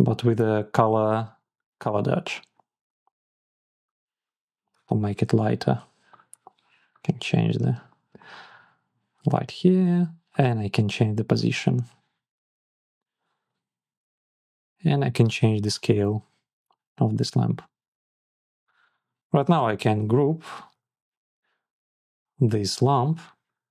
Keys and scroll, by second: 20.6 super+g.